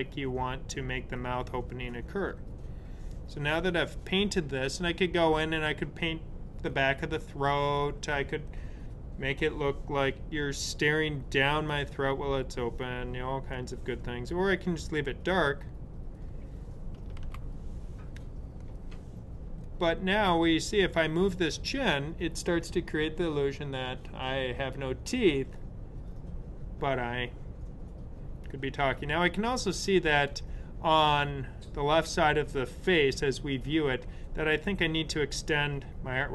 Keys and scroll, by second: 17.1 super+z.